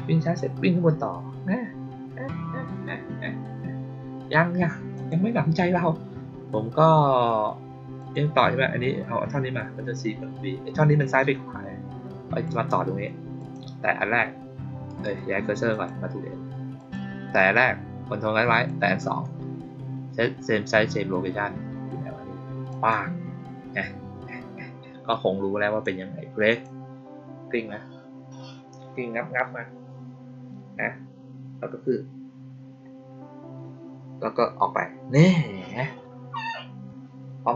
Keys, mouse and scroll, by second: 4.9 click, 7.9 click, 11.1-12.3 drag, 13.3 click, 14.8 right click, 15.6 click, 16.7 click, 18.4 ctrl+click, 22.6 click, 25.0 click, 26.4 click.